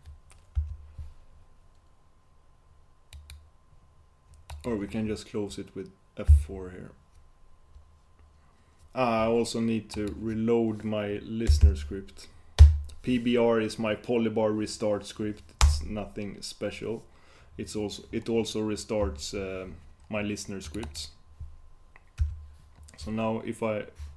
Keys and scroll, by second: 6.4 F4.